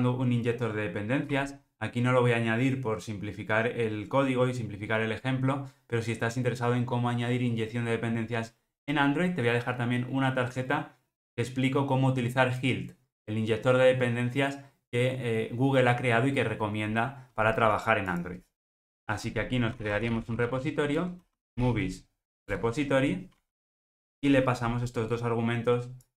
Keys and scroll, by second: 20.9 Return, 22.6 Return.